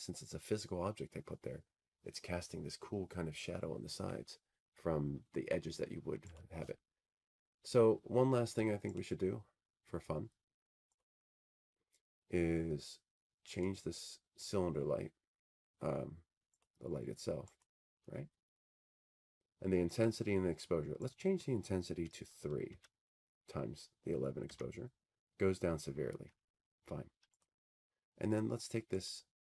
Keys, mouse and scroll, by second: 12.1-14.1 drag, 14.5-16.5 drag, 19.2 click, 22.2 click, 23.2 click, 24.4 scroll, 27.1 click, 28.2 click.